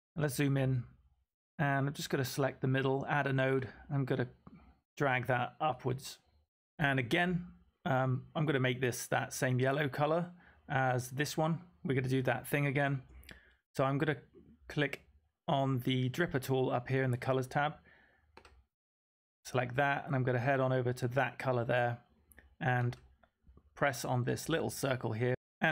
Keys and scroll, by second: 0.0-0.4 typing, 25.0-25.7 typing.